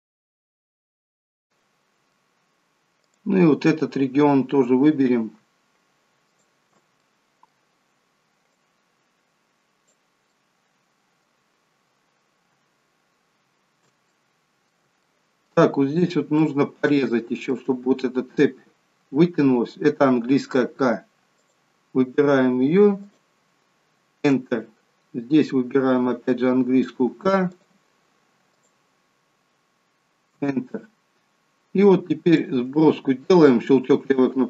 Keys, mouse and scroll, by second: 0.6 middle click, 1.0 middle click, 1.4 middle click, 3.0 click, 4.4-4.9 scroll up 2, 6.2 alt+shift+click, 7.0 middle click, 8.5 click, 10.3 middle click, 14.1 middle click, 15.0 shift+middle click, 15.7-16.3 scroll up 2, 16.3 middle click, 17.1 middle click, 20.5 k, 26.9 k, 32.4 click.